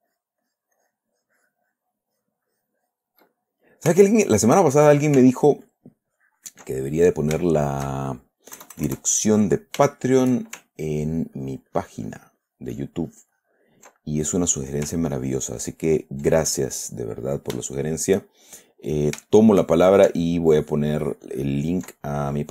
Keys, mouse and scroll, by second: 2.3-3.6 ctrl+middle drag, 3.7 ctrl+middle click, 4.3 ctrl+shift+middle click, 4.5-5.6 shift+drag, 6.1-7.1 ctrl+drag, 7.1 ctrl+click, 7.8 ctrl+shift+click, 8.9 KP_Add, 10.3 shift+middle click, 11.4-12.7 ctrl+drag, 14.3 ctrl+middle click, 15.5-16.6 ctrl+drag, 17.3 click, 18.1-20.4 shift+middle drag, 20.9-22.5 ctrl+drag.